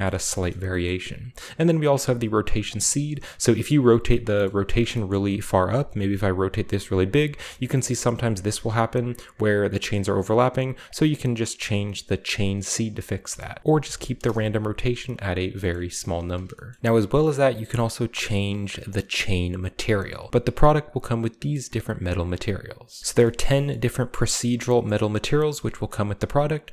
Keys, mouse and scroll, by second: 0.5 scroll up 2, 0.9 middle click, 1.6-2.8 drag, 2.8-5.3 middle drag, 4.5-5.4 shift+scroll up 1, 5.8-7.3 middle drag, 7.7 scroll up 2, 7.9-10.8 shift+middle drag, 12.8 click, 13.9 typing, 14.2 Return, 15.8-16.8 shift+middle drag, 16.0-16.8 shift+scroll down 2, 19.7 click, 20.4 right drag, 20.8 right click, 21.4 right drag, 21.7-23.6 right drag, 23.0-23.7 shift+middle drag, 24.9-26.7 middle drag.